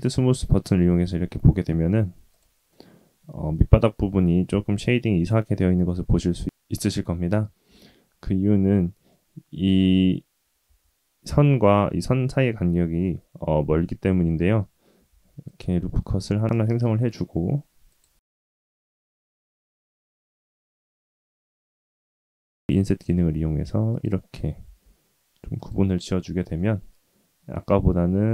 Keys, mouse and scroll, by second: 1.6 click, 2.0-6.1 middle drag, 7.6 Tab, 9.1 middle click, 10.6 1, 15.0 ctrl+r, 18.2 Tab, 18.5-19.4 middle drag, 19.6 Tab, 19.8 click, 20.4 click, 21.8 i, 24.6 i, 26.2 Tab, 26.5-28.3 middle drag.